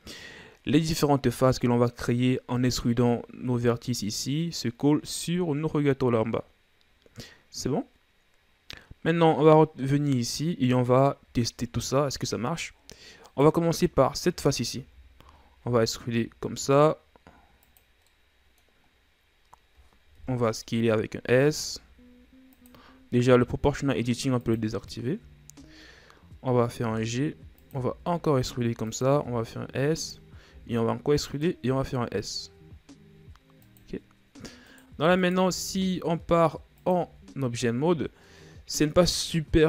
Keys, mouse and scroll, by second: 10.1-12.5 scroll up 1, 12.5-13.1 scroll up 1, 13.2 right click, 13.9-14.5 scroll down 1, 14.5 shift+right click, 15.0-15.6 scroll down 1, 15.6 e, 17.9 scroll down 1, 18.1 middle click, 18.9-20.1 scroll up 1, 20.1 KP_1, 21.2 s, 24.4-25.4 drag, 25.4-26.9 scroll down 3, 26.9 g, 27.9 e, 29.2 s, 34.6 right click, 35.2 alt+right click, 35.7 s, 37.0 Tab, 37.4-38.2 scroll down 3, 38.2-39.6 middle drag.